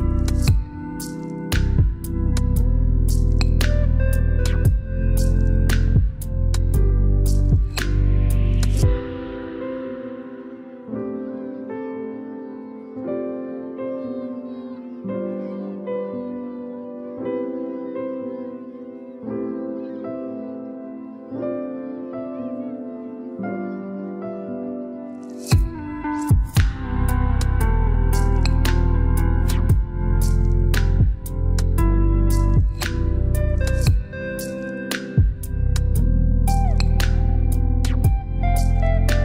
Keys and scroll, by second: 3.4 2, 3.8 0, 4.7 Return.